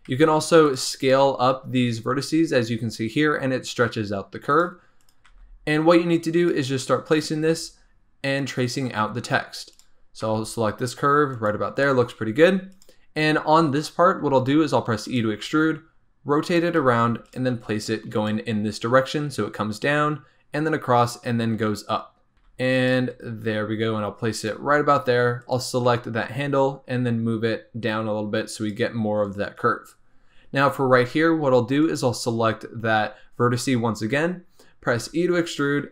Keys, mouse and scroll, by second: 0.1 s, 1.0 click, 1.5 s, 5.0 click, 5.3 g, 7.1 click, 7.4 g, 8.7 scroll down 2, 9.1 scroll up 2, 9.7 click, 10.2 g, 11.8 shift+middle click, 12.7 click, 14.2 e, 15.4 r, 16.7 g, 17.5 r, 22.3 g, 22.4 r, 22.9 g, 25.4 click, 25.8 g, 30.3-31.0 scroll down 2, 31.0 scroll up 2, 31.8 click, 34.9 e, 35.8 r.